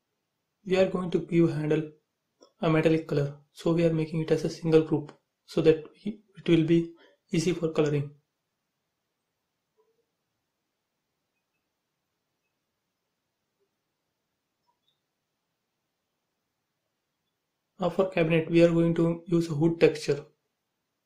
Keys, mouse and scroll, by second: 4.1 right click, 5.0 click, 6.2 b, 6.8 click, 7.6 space, 9.3-12.3 drag, 12.6 space, 13.5 click, 14.7 b, 16.2 click, 18.4-21.0 drag.